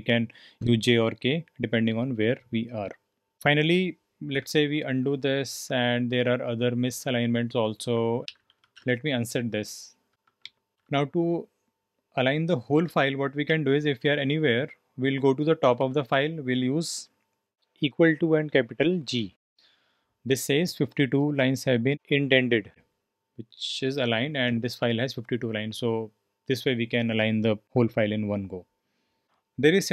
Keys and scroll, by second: 4.3 typing, 6.2-11.2 typing, 13.5-14.0 typing, 15.6 typing, 18.0-18.6 typing, 24.0 shift+g, 29.2 Return, 29.7-29.9 typing.